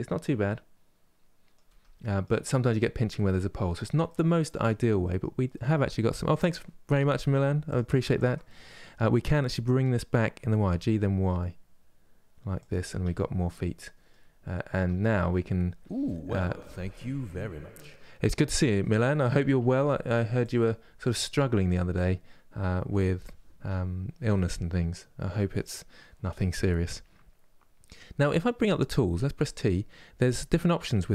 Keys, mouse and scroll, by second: 1.4 Tab, 1.7-7.4 middle drag, 7.4 click, 7.9 shift+click, 8.2-10.2 middle drag, 10.2 g, 12.6 Tab, 12.8-14.2 middle drag, 14.2-14.5 scroll down 1, 14.5 Tab, 14.7 middle click, 15.2-15.7 scroll up 2, 15.7-19.3 shift+middle drag, 19.3 3, 19.5 middle click, 20.1 click, 20.7 shift+click, 21.4 shift+click, 29.0 t.